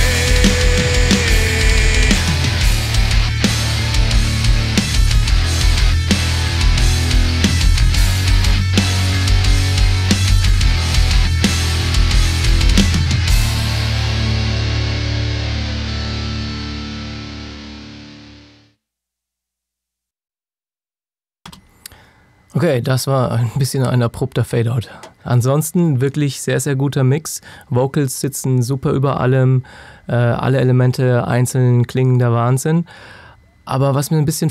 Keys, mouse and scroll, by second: 21.3 space.